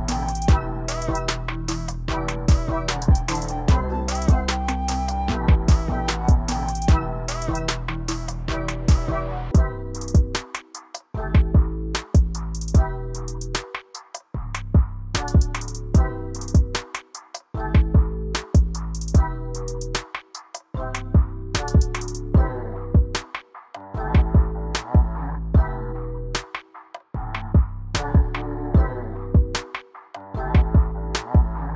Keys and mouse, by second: 0.9 middle click, 2.7 g, 3.1 y, 6.9-7.7 drag, 8.0 g, 10.2-11.4 middle drag, 11.5 ctrl+z, 14.9 g, 16.0 click, 24.7 click, 30.5-31.7 drag.